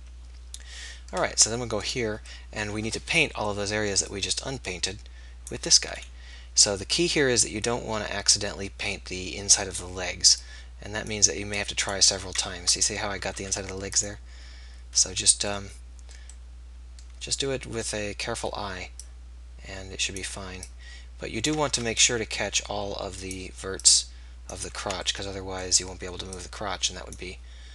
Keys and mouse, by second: 2.3-4.0 middle drag, 4.0-6.1 drag, 6.1 middle click, 7.7-8.9 drag, 13.4 ctrl+z, 13.4-16.6 drag, 16.8-22.4 drag, 21.8 ctrl+z, 24.9 ctrl+z, 25.2-27.7 middle drag.